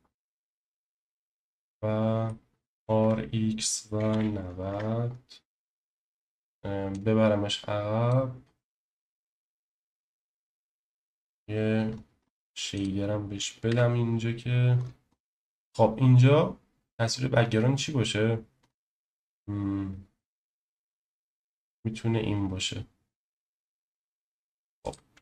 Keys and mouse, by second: 0.3-1.2 middle drag, 1.5 middle click, 2.7 0, 2.7 r, 4.0 9, 4.1 0, 4.7 Return, 5.7 middle click, 6.9 click, 8.9-9.5 shift+middle drag, 11.0 click, 13.7 Delete, 15.4 shift+middle click, 24.8 click.